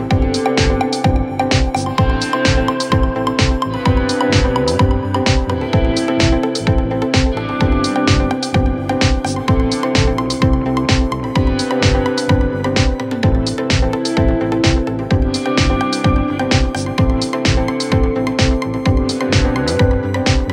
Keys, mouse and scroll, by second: 0.0 middle click, 0.7 scroll down 1, 0.9 middle click, 1.7 scroll up 1, 1.8 middle click, 2.4 scroll up 1, 2.5 scroll down 7, 2.8 middle click, 3.3-3.9 scroll down 2, 3.5 middle click, 3.9 middle click, 4.2-4.8 scroll up 3, 4.8 middle click, 5.5-5.9 scroll up 7, 6.0 scroll down 1, 8.0 scroll down 8, 8.2 middle click, 8.9-9.4 scroll up 9, 9.6 scroll down 7, 10.1 r, 10.2-11.1 scroll up 12, 12.7 scroll down 6, 13.4 scroll up 6, 14.0-15.9 typing.